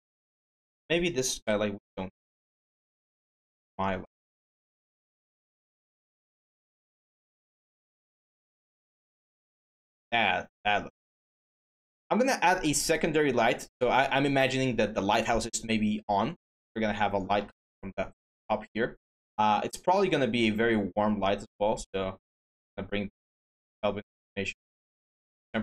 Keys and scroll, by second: 1.2 Delete, 5.3 w.